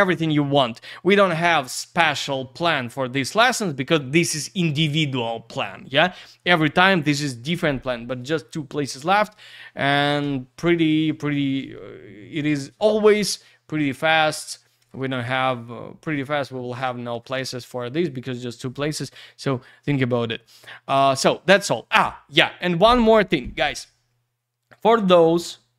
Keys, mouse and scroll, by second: 21.1 scroll up 1.